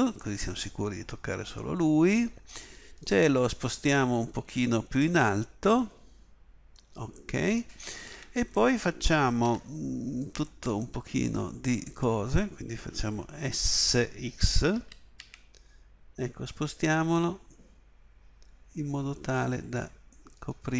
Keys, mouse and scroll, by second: 8.1 a, 9.4 b, 14.7 s.